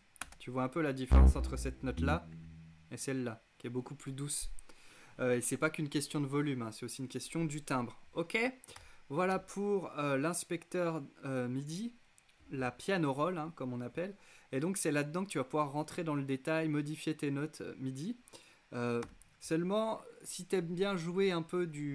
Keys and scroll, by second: 8.3 x, 18.6 e.